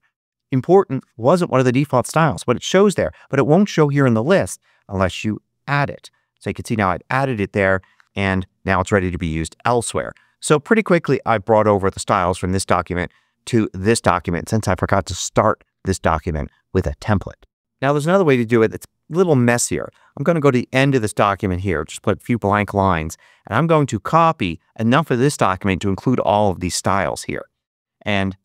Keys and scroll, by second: 8.3 Return, 21.5 Return, 28.3 super+c.